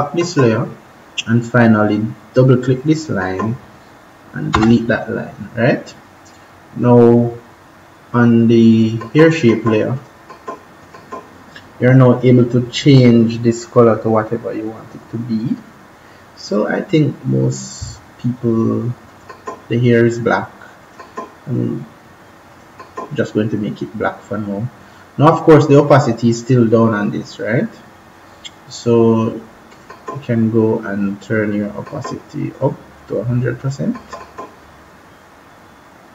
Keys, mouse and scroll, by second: 2.6 click, 4.4 Delete, 8.7 click, 19.0 click, 29.6 click.